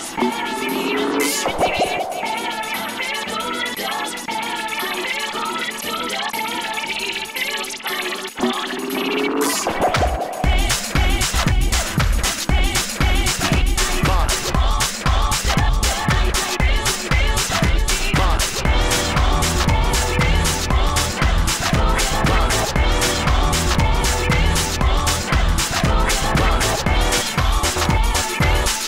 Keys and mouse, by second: 1.4 e, 2.7 r, 2.8 s, 3.8 n, 5.8 n, 6.0 a, 6.4 l, 8.1-11.0 typing, 11.4 ctrl+p, 12.3 a, 13.0 l, 15.3 middle click, 17.7 KP_1, 18.4 a, 18.8 l, 22.2 a, 22.5 l, 22.9 a, 23.3 l, 24.3 ctrl+s, 24.3 a, 26.3-27.5 typing, 27.5 ctrl+a, 27.7 ctrl+p.